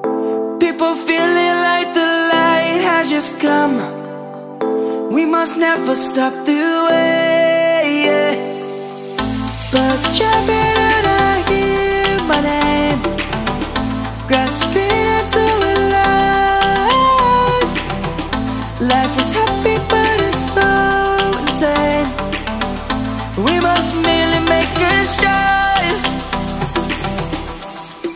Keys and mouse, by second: 1.0 ctrl+z, 1.5 ctrl+z, 2.4 click, 4.7 click, 5.2 z, 5.8 click, 7.1 middle click, 11.1 middle click, 11.9 click, 13.1 3, 14.5 ctrl+b, 15.5 right click, 16.4 middle click, 17.1 ctrl+z, 17.4 ctrl+z, 17.9 ctrl+z, 19.2 ctrl+b, 24.1 1, 25.1 shift+middle click, 26.2 s.